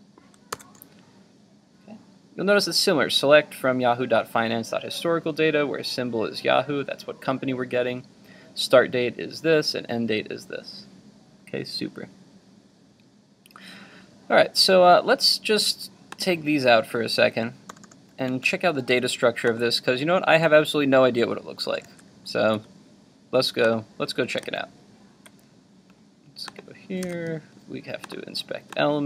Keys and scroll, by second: 0.5 super+v, 21.8 super+s, 24.6 super+Tab, 27.2 super+r.